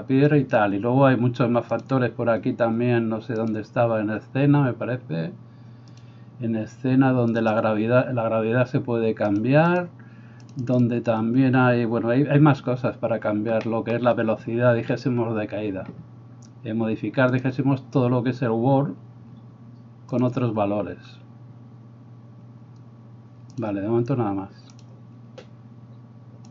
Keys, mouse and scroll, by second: 1.8-3.7 drag, 3.7-6.0 middle drag, 6.0 click, 6.1-7.5 middle drag, 7.5-17.4 drag, 17.4-20.2 middle drag, 20.2-23.7 drag, 23.7-26.5 middle drag.